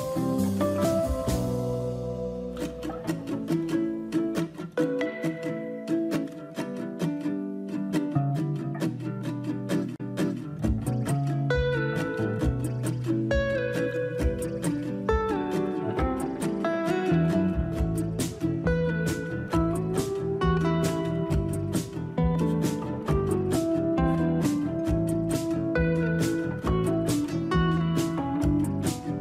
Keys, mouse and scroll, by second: 0.9 click, 0.9-3.6 scroll down 1, 4.2 scroll down 4, 7.6-8.9 scroll down 1, 9.9-11.3 scroll up 1, 11.3 KP_7, 11.3 KP_3, 15.3 click, 19.4 c, 22.1-24.1 scroll up 9, 24.1-24.9 scroll down 6.